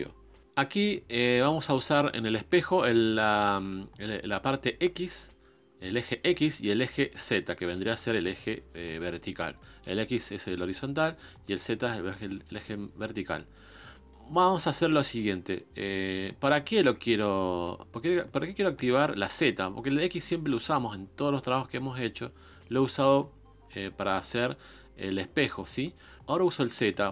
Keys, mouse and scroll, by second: 1.3 click, 7.0 click, 13.5-27.1 middle drag.